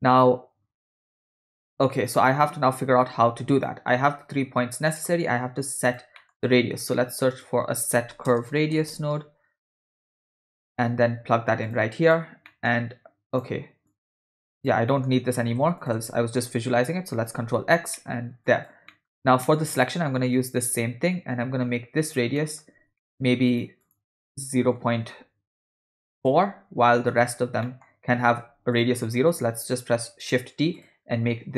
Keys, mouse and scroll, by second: 0.3 click, 1.5 middle click, 2.1-3.7 ctrl+drag, 4.9 middle click, 5.7 drag, 6.1 middle click, 6.3 scroll up 1, 6.6 shift+a, 12.5 middle click, 13.2 click, 13.9 click, 14.3 middle click, 14.6 drag, 14.9 middle click, 15.8 shift+click, 17.3 ctrl+x, 17.9 middle click, 18.5 click, 18.9 middle click, 19.4 middle click, 20.4-22.2 drag, 22.3 middle click, 23.0 ctrl+middle click, 23.5 click, 23.8-26.3 drag, 27.0 click, 27.6 middle click, 28.7 drag, 29.6 shift+d, 30.8 click.